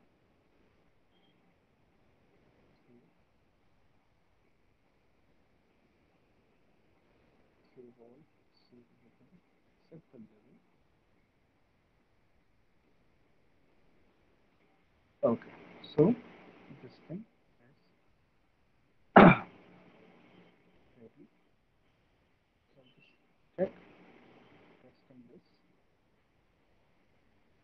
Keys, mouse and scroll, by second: 8.5 click, 11.1 click, 13.0 click, 15.9 alt+right click, 16.7 alt+middle click, 17.1 alt+click, 18.3 alt+right click, 18.7 alt+middle click, 20.7 alt+right click, 25.3 click.